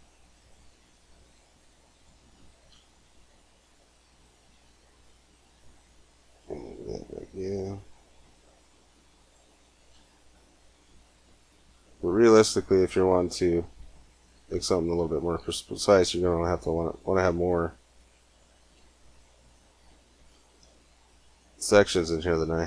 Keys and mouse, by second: 0.4-1.6 right drag, 1.6-4.0 drag, 4.3 g, 9.0-10.3 drag, 10.8 g, 13.6 click, 15.3-18.4 drag, 17.1 g, 19.0 click, 21.7 a, 22.0 c.